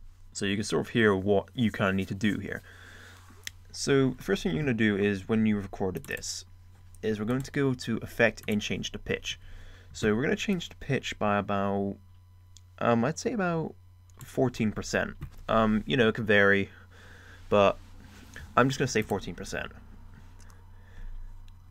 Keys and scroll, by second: 0.1 space.